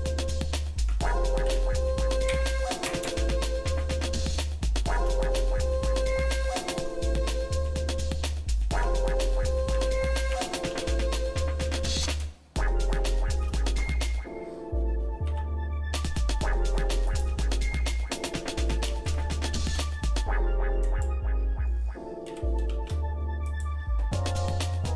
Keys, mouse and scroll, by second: 3.0 KP_Enter, 4.3 shift+middle click, 5.4 middle click, 5.8 shift+middle click, 8.7 Tab, 9.7 r, 13.0 shift+middle click, 13.9 middle click, 15.3 s, 17.5 scroll up 1, 18.1 scroll up 1, 19.0 g, 22.3 g, 24.0-24.5 scroll up 2, 24.7 scroll down 1.